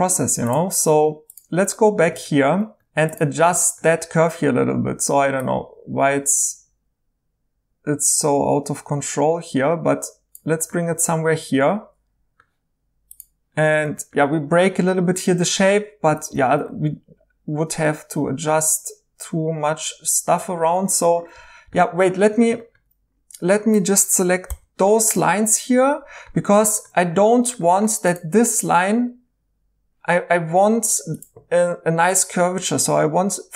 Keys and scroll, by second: 4.2 1, 16.1 2, 24.4 h.